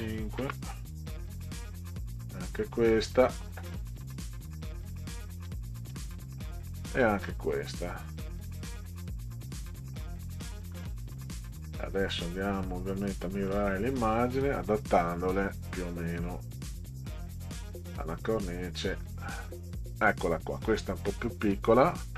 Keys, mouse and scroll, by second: 0.4 Return, 1.6 click, 2.8 click, 4.9 6, 5.5 5, 5.9 Return, 6.1 click, 6.7 click, 8.0 click, 10.2 5, 10.6 Return, 13.2 click, 14.5 click, 15.1 click, 17.7 click, 18.8 click.